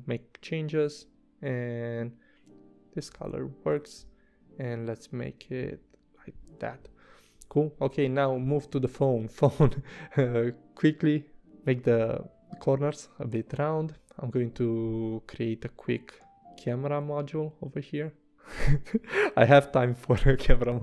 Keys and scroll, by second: 5.5 v, 9.0 a, 18.7 v, 19.4 i, 20.1 v.